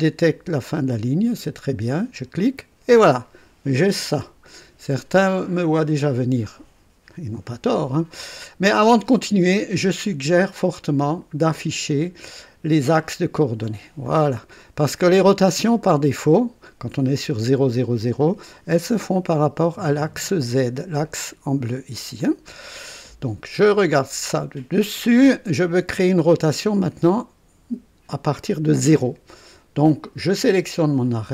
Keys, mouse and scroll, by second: 1.9 click, 11.5 click, 12.9 click, 14.0-15.1 drag, 15.5-16.6 drag, 18.2 click, 19.1-19.7 drag, 20.2 click, 22.2-23.2 drag, 23.9 click.